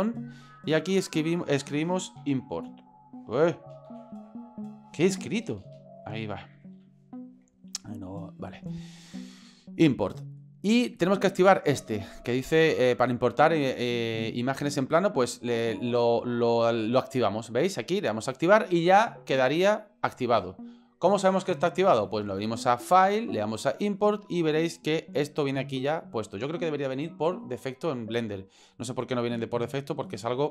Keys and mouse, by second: 23.0-30.5 drag.